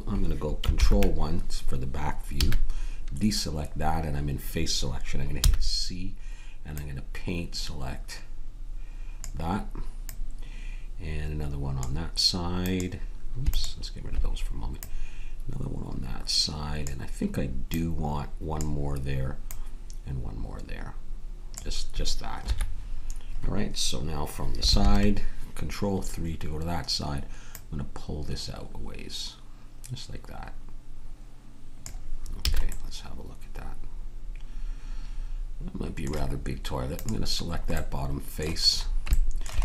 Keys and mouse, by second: 2.4 a, 3.1 middle click, 5.4 c, 22.9-24.7 middle drag, 29.3-31.8 middle drag, 32.5 a, 32.6 middle click, 37.4-39.6 drag.